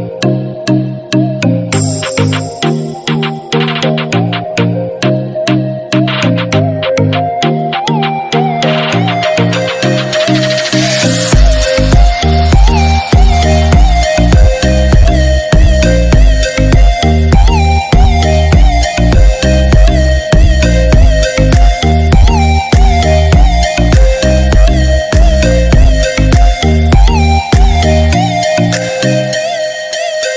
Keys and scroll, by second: 15.9 ctrl+-.